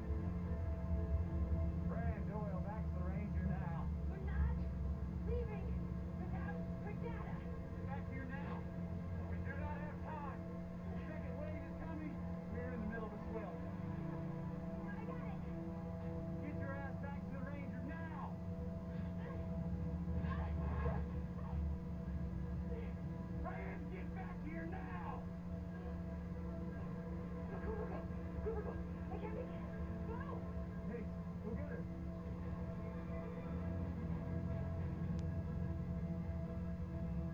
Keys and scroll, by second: 11.9 Down, 12.6 Down, 32.9 Down, 34.1 Right.